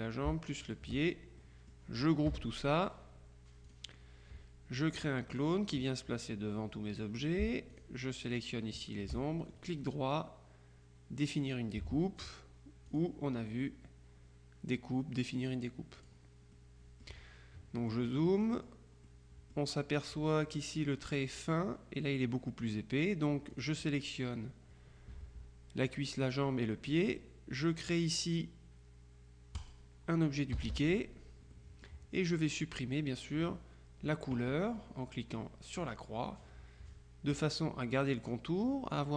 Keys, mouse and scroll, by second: 0.8 shift+click, 1.5 click, 2.4 KP_Subtract, 3.8 click, 5.4 click, 7.8 shift+click, 9.7 right click, 12.3 click, 13.0 click, 16.1 click, 17.9-19.7 drag, 23.6 click, 29.7 click, 30.6 KP_Subtract, 31.6 click, 35.9 click.